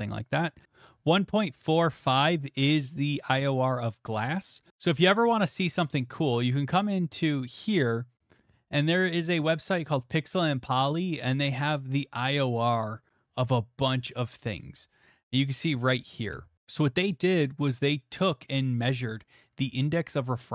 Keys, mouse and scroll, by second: 4.7 click, 4.7 typing, 5.2 alt+Tab, 9.4 click, 10.7-12.7 scroll, 12.6 middle click, 13.2 scroll, 14.2 click, 14.2-16.4 scroll.